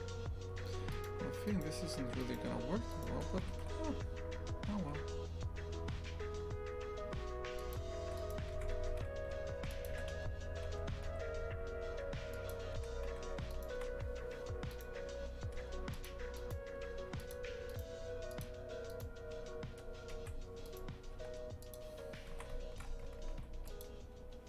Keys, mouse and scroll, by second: 0.7 2, 0.9-3.5 right drag, 3.5 g, 8.0 3, 8.2 right click, 8.5 shift+f, 9.9 e, 13.5 alt+shift+right click, 14.7 right click, 16.0 Delete, 16.4 right click, 17.3 Delete, 17.7 right click, 18.4 Delete, 18.9-21.7 right drag, 21.7 Delete, 22.3 shift+f.